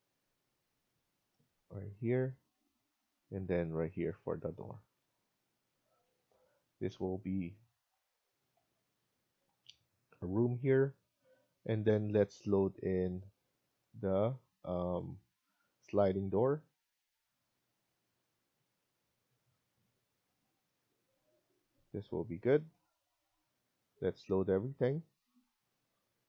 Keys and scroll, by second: 10.9 Escape, 11.2 Escape.